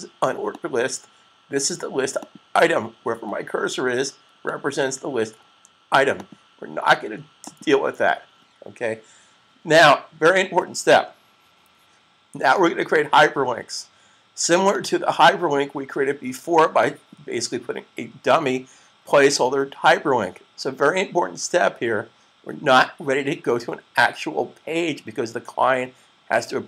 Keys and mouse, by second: 14.6 click.